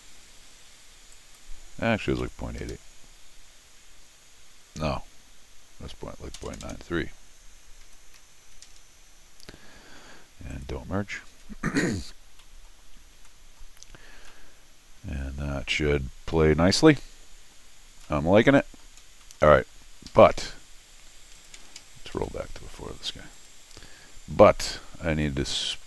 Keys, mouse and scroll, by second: 1.1 click, 6.4 BackSpace, 10.5 click, 12.4 scroll down 2, 13.3 middle click, 13.8-14.2 scroll up 2, 14.3-15.7 middle drag, 16.3 middle click, 16.8-17.3 scroll down 1, 18.0 scroll up 1, 18.0 middle click, 19.0 scroll down 1, 19.2 middle click, 20.1 Escape, 21.3 click, 22.1 ctrl+alt+r, 23.3 click, 23.8 s, 24.4-24.9 scroll down 2, 25.0 scroll down 2, 25.1 scroll up 2, 25.2 middle click.